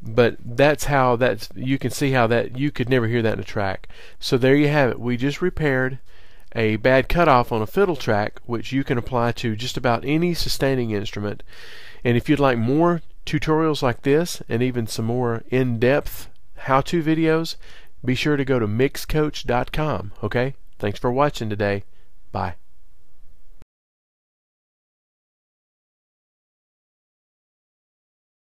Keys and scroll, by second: 0.0 super+[.